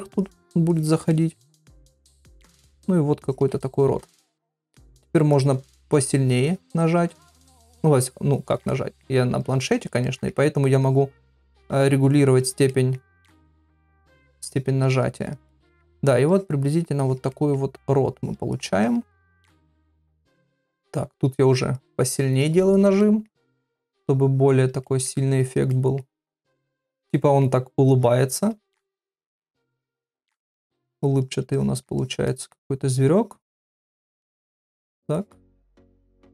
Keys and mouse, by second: 0.2 click, 0.7 click, 1.1 middle click, 1.7 click, 2.1 click, 2.6 middle click, 3.3 click, 4.0 [, 4.1 [, 4.7 click, 4.7 [, 5.0 click, 5.3 click, 5.7 click, 6.0 click, 6.5 click, 6.8 click, 7.1 click, 7.5 click, 7.8 click, 8.0 click, 8.3 click, 8.7 middle click, 9.4 click, 9.8 click, 10.0 middle click, 10.9 click, 11.2 click, 11.6 click, 12.0 click, 12.4 click, 12.7 middle click, 13.3 click, 13.6 click, 13.9 click, 14.3 click, 14.9 click, 15.2 click, 15.5 middle click, 16.3 click, 16.7 click, 17.0 click, 17.3 middle click, 18.2 click, 18.6 click, 18.8 click, 19.1 middle click, 19.8 click, 20.2 click, 20.8 click, 21.4 click, 21.8 click, 22.1 click, 22.4 click, 22.7 click, 23.0 middle click, 23.7-24.7 drag, 24.8 middle click, 25.4 click, 25.7 middle click, 26.6 click, 27.1 middle click, 27.9 click, 28.4 click, 28.7 middle click, 29.6 click, 29.9 middle click, 30.6 click, 30.9 click, 31.2 click, 31.5 click, 32.0 click, 32.3 middle click, 32.9 click, 33.2-34.5 drag, 34.6 click, 34.9 click, 35.2 click, 35.6 middle click.